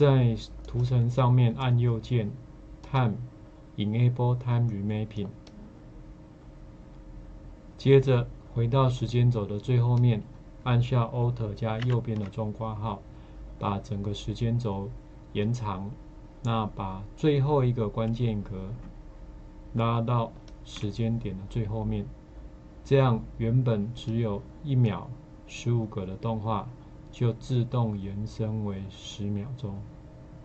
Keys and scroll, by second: 11.8 alt+].